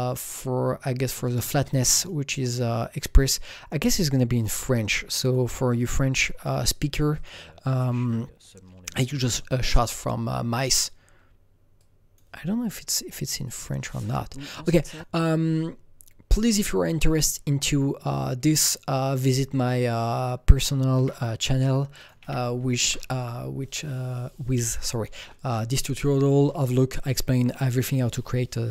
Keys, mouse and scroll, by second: 2.0 click, 2.0 scroll up 1, 4.4 click, 4.8 click, 5.8 click, 7.1 click, 11.8-14.9 drag, 14.9-17.5 drag, 17.7 click, 18.4 click, 20.2-22.2 drag, 21.0 ctrl+c, 22.2 ctrl+v, 22.8 KP_Enter.